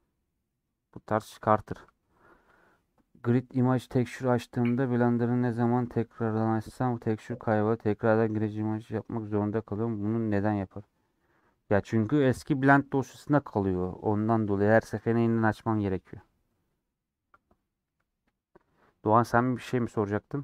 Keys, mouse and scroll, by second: 0.8 scroll down 2, 1.1-20.4 middle drag.